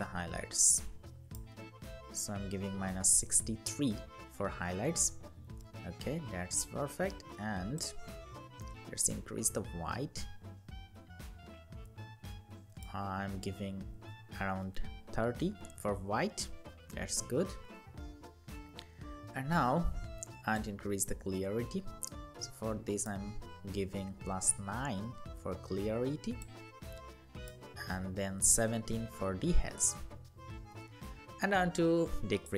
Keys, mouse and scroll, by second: 1.3 Down, 1.5 Down, 1.7 Down, 2.0 Down, 2.8 Up, 12.8 Down, 13.6 Down, 27.4 Up, 27.7 Up.